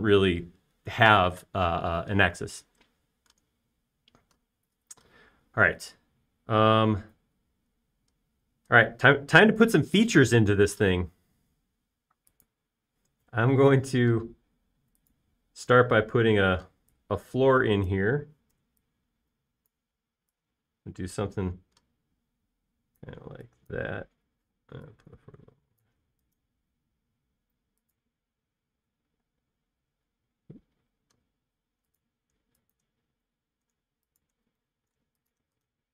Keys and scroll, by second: 12.6 r, 17.6 p, 24.4-25.4 typing, 30.4 space.